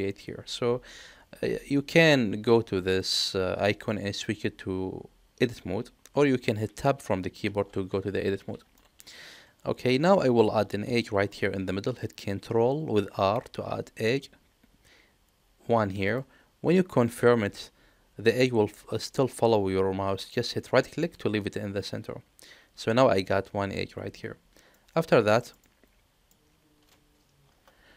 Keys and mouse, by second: 3.1-6.1 drag, 7.4 Tab, 8.8 shift+middle click, 11.0 ctrl+r, 24.7 middle click, 25.6 middle click.